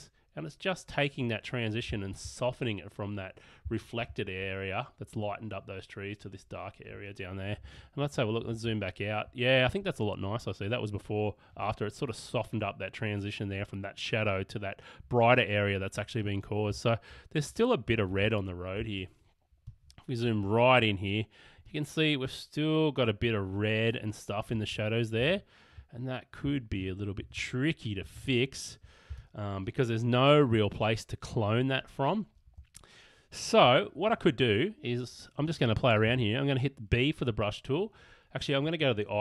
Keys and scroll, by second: 7.8 super+-, 16.8 super+=, 18.8 super+space, 25.3 super+=, 26.5 super+-, 28.2 super+=, 29.1 super+space, 36.1 b.